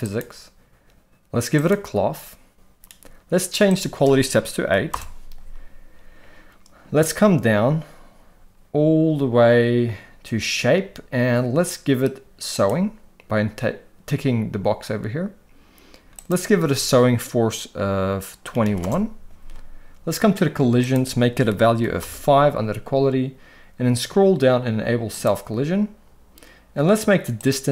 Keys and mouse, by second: 0.0 click, 1.6 click, 3.7-4.9 drag, 12.5 click, 16.2-18.8 drag, 20.8-22.0 drag, 25.1 click, 27.5-27.7 drag.